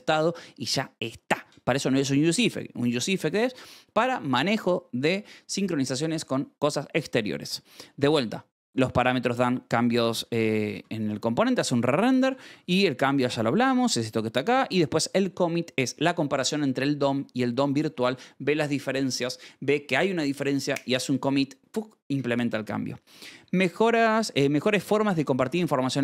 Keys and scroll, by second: 1.3 Escape, 6.1 Escape, 6.9 j, 7.7 k, 8.0 shift+v, 8.9 Escape, 10.1-14.9 typing, 11.0 Escape, 22.6 Escape, 22.6-24.8 typing, 25.7 Escape.